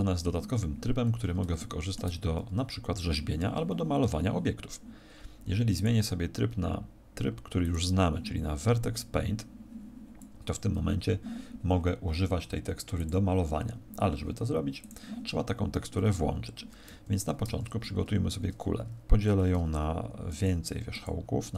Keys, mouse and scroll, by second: 1.0-1.5 scroll up 3, 5.7 click, 8.8 click, 12.9 click, 16.8 Escape, 17.4 Tab, 20.7 w.